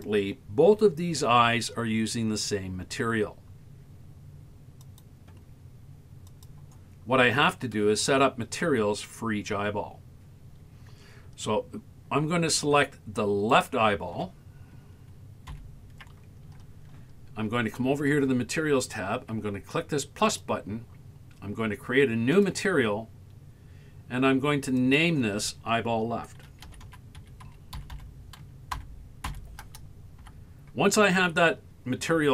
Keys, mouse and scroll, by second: 4.8 click, 6.3 click, 13.6 right click, 15.5 ctrl+l, 20.3 click, 22.3 click, 24.8-31.2 drag, 28.0 l.